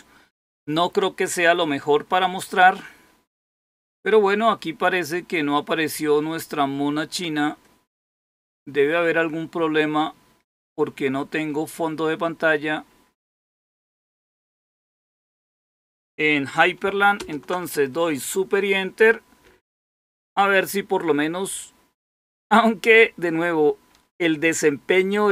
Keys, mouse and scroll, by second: 17.1 super+Return.